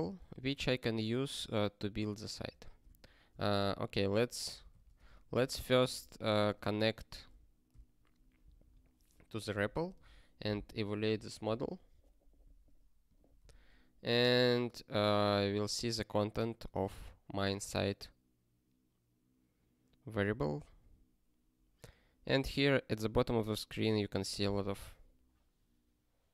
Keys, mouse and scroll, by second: 0.1 ctrl+space, 0.2 ctrl+a, 0.5 alt+;, 2.5 ctrl+space, 2.8 ctrl+a, 3.7 click, 4.3 ctrl+space, 4.5 ctrl+p, 4.7 alt+;, 5.0 ctrl+s, 5.4 alt+x, 6.4 Return, 7.3 Return, 9.5 super+o, 10.5 ctrl+k, 13.0 click, 13.5 ctrl+e.